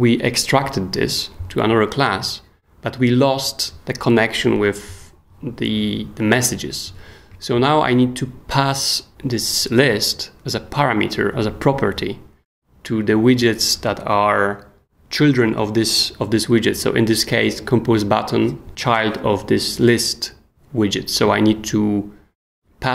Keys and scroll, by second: 9.1 s.